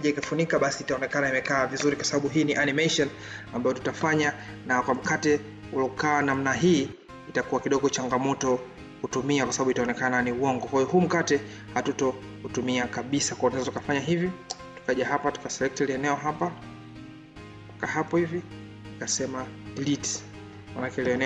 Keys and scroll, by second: 20.8 ctrl+d.